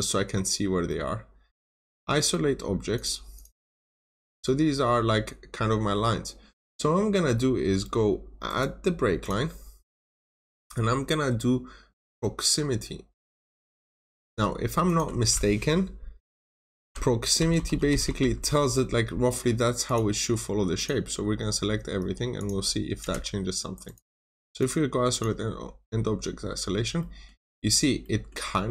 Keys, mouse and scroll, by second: 0.8 middle click, 1.5 right click, 2.8 click, 3.2 double click, 3.9 scroll down 1, 4.0 middle click, 8.4 right click, 9.1 click, 16.7-18.4 typing, 19.7 click, 22.9 Return, 23.7 right click, 24.5 click, 26.0 scroll up 1, 26.9 middle click, 27.3 scroll down 1, 27.9 middle click.